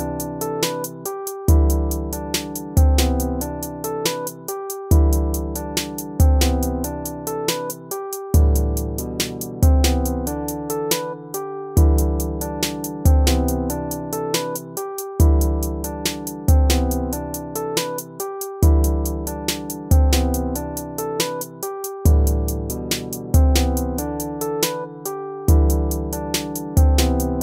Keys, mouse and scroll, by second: 0.6 ctrl++, 1.5 BackSpace, 1.7 ctrl+-, 3.4 ctrl++, 5.4 ctrl+-, 9.2 BackSpace, 9.9 ctrl+-, 11.0 ctrl+-, 11.8 ctrl++, 13.4 ctrl+-, 13.8 ctrl++, 14.5 ctrl+-, 18.1 ctrl+-, 18.8 ctrl+=, 23.1 ctrl+-, 25.2 ctrl+-, 25.6 ctrl++, 26.6 right click.